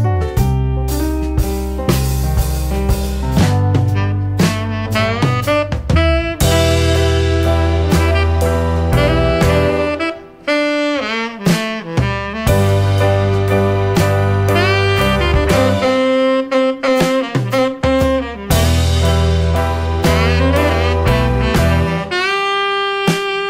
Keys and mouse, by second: 1.1 click, 1.3 shift+a, 7.0 shift+a, 12.8-13.5 drag, 14.5 click, 15.5 middle click, 16.6 middle click, 18.2-21.1 drag, 22.0-23.4 drag.